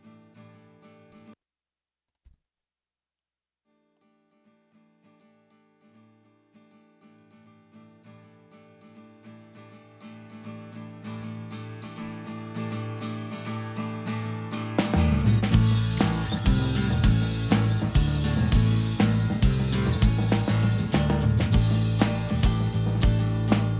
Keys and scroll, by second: 1.0 space, 2.2 space, 11.7 super+=.